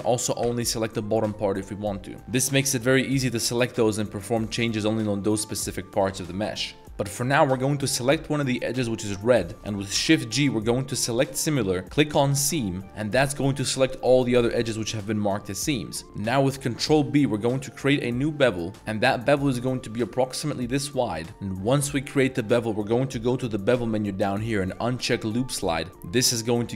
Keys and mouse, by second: 0.4 l, 1.2 middle click, 2.2 ctrl+z, 3.0 i, 4.7 s, 5.4 click, 5.8 middle drag, 6.2 ctrl+z, 6.5 ctrl+z, 6.7 ctrl+z, 6.9 2, 7.2 click, 8.1 z, 8.7 middle click, 9.5 z, 9.9 shift+g, 13.4 middle drag, 15.5 middle click, 16.0 middle click, 16.8 ctrl+b, 21.8 middle click, 25.3 click, 25.9 middle click.